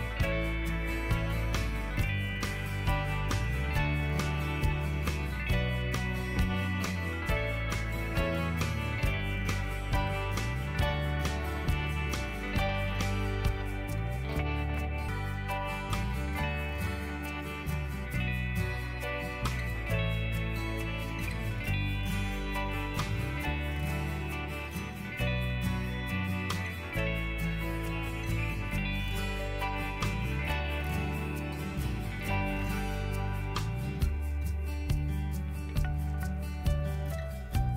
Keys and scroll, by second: 14.5 Down, 15.5 Up, 22.7-23.9 typing, 25.0 ctrl+z, 30.0-31.5 typing, 36.0 ctrl+t.